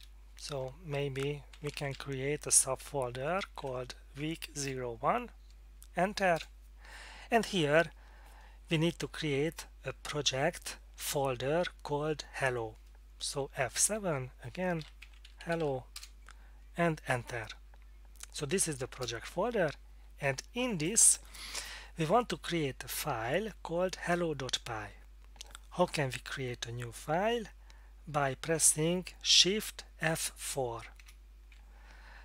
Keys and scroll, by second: 1.0-4.1 typing, 4.6 Return, 6.4 Return, 13.9 F7, 14.6-16.1 typing, 19.0 Return, 31.0 shift+F4.